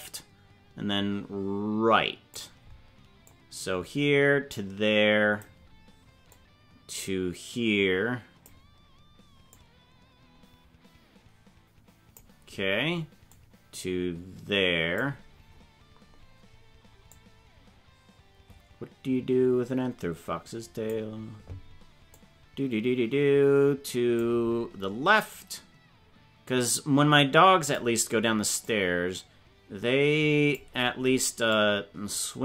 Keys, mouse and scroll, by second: 3.2-5.4 drag, 6.4-8.4 drag, 9.4-12.2 drag, 13.2-15.0 drag, 15.2-15.6 scroll down 6, 16.1 scroll up 1, 17.1-21.0 drag, 22.2-24.2 drag, 25.2-27.8 drag, 28.6-30.6 drag, 31.4-32.4 drag.